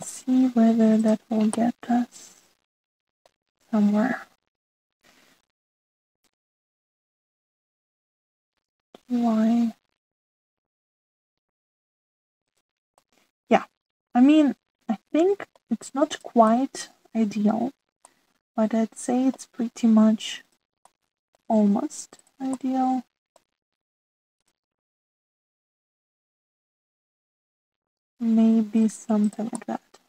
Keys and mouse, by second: 0.0-1.1 middle drag, 2.0 middle click, 2.5-4.3 middle drag, 7.1 click, 8.6 shift+click, 9.5 g, 13.4 middle click, 13.9-16.1 middle drag, 16.5-17.6 drag, 17.9 middle click, 19.0-20.3 middle drag, 21.4 middle click, 21.8 middle click, 23.6 middle click, 25.3 click, 26.5 s, 29.4 s.